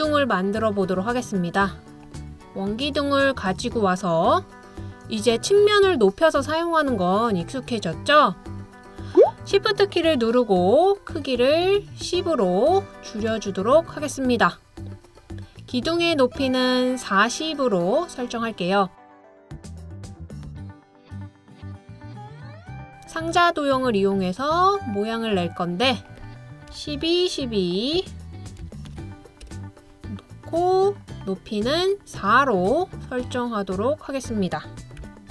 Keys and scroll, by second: 26.7 typing, 28.6 typing, 29.4 Return, 31.2 typing, 35.0-35.3 typing.